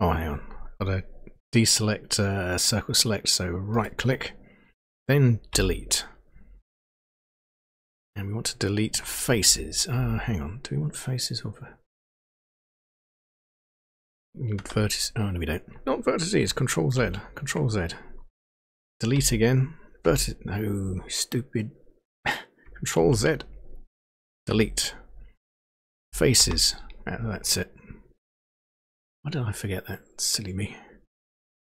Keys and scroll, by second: 5.5 Delete, 9.4 Down, 9.9 Up, 14.6 Return, 16.9 ctrl+z, 19.1 Delete, 20.0 Return, 22.9 ctrl+z, 24.5 Delete, 25.4 Down, 26.0 Down, 26.4 Return.